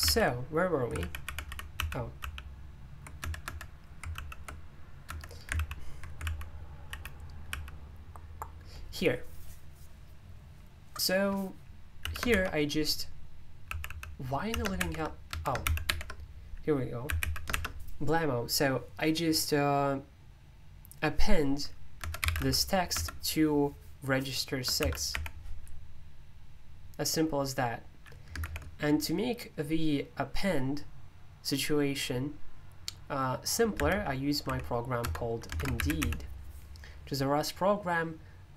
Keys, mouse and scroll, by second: 0.0 ctrl+o, 1.0 ctrl+o, 1.4 ctrl+o, 1.8 ctrl+l, 2.2 ctrl+l, 3.2 Escape, 3.4 Escape, 4.2 ctrl+l, 5.1 Escape, 5.5 super+l, 6.2 ctrl+o, 6.9 ctrl+o, 12.0 f, 13.4-17.6 typing, 15.3 Escape, 22.0 Escape, 22.2-22.9 typing, 24.5-25.6 typing, 33.7-36.5 typing.